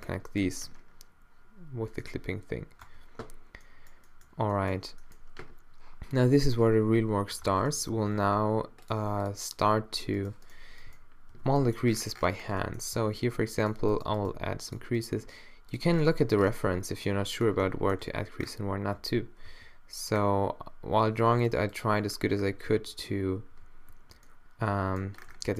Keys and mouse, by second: 0.0 Tab, 2.9 Tab, 7.5 shift+Tab, 8.2 shift+Tab, 10.3 right click, 11.3 -, 12.3 middle click, 12.8 right click, 13.0 g, 14.3 g, 15.2 g, 18.1 2, 19.0 3, 19.6 4, 22.6 4, 22.9 3, 23.6 2, 23.9 3.